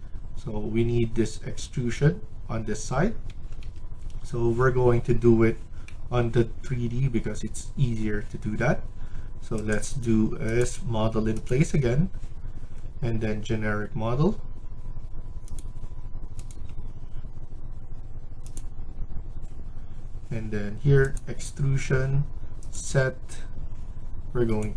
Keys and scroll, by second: 3.2 Escape, 3.5 Escape.